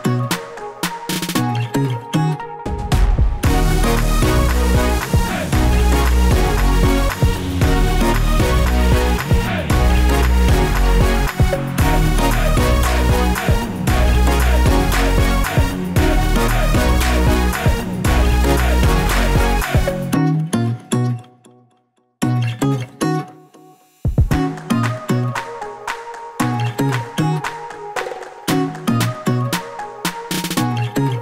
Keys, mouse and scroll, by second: 1.2 click, 2.3 click, 3.5 click, 4.2 click, 4.7 click, 6.3 click, 7.5 click, 8.8 click, 9.5 click, 10.9 click, 11.5 middle click, 12.1-12.7 scroll up 4, 12.7 shift+middle click, 13.3 KP_0, 14.2 click, 14.7 g, 15.7 middle click, 16.5-16.9 scroll down 3, 16.9 middle click, 18.8 click, 19.6 click, 20.7 click, 26.5 click, 27.4 KP_0, 29.1 click, 30.1 click, 30.4 click, 30.7 click, 31.0 click.